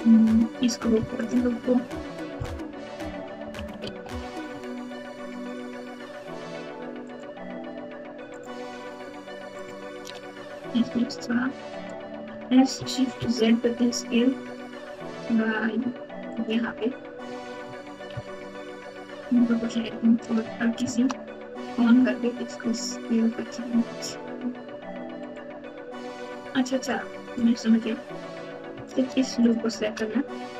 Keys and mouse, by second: 1.1 alt+click, 3.1 KP_2, 3.4 KP_2, 3.8 alt+z, 7.0 alt+shift+click, 9.5 alt+shift+click, 10.7 s, 12.3 s, 18.4 ctrl+z, 19.5 o, 19.8 s, 28.9 alt+click, 29.4 alt+click.